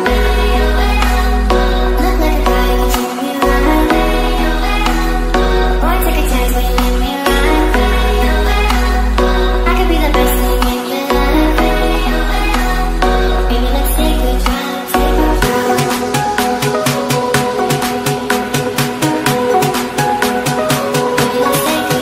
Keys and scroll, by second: 11.5 ctrl+space.